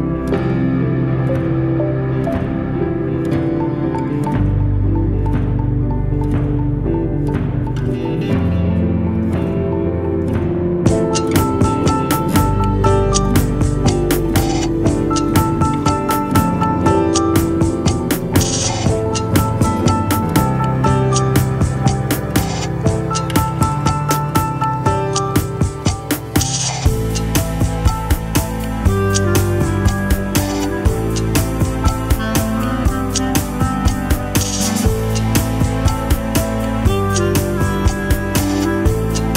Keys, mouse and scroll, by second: 9.4-9.8 scroll down 1, 10.1 s, 10.1 scroll up 1, 10.6 s, 12.0 scroll up 1, 12.2 super+click, 12.9 super+click, 15.7 scroll down 1, 16.2 super+click, 18.8 alt+click, 20.9 right click, 25.2 double click.